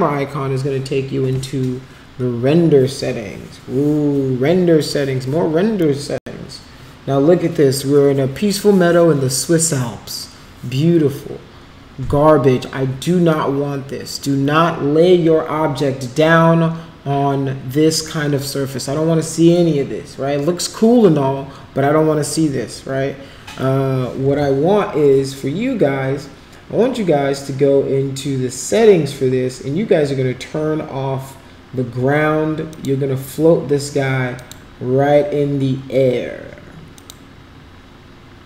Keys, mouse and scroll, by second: 32.7 click, 34.3 click, 37.0 click.